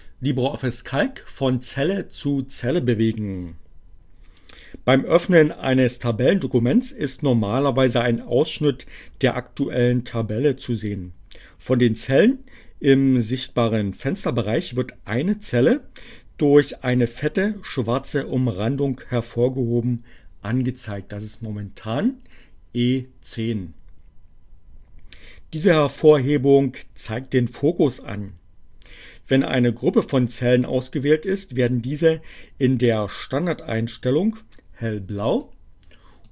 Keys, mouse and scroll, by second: 35.3 click.